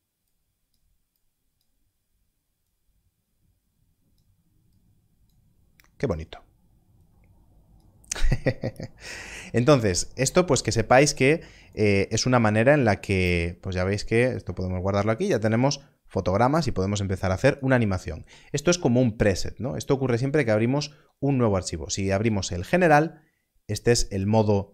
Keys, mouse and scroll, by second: 11.3 click, 19.5 click, 22.2 click.